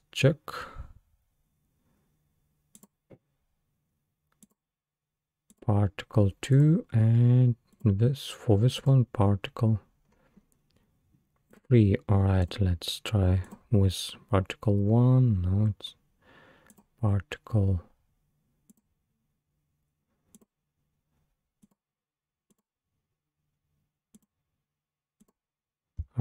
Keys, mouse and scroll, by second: 2.8 click, 4.4 click, 5.6-6.6 drag, 7.7 click, 8.9-9.7 drag, 9.7 scroll down 3, 10.1-10.6 scroll up 5, 11.5 click, 12.4 click, 13.6-15.5 drag, 16.7 click, 18.8 click, 20.4 click, 21.7 click, 24.2 click, 25.3-26.2 drag.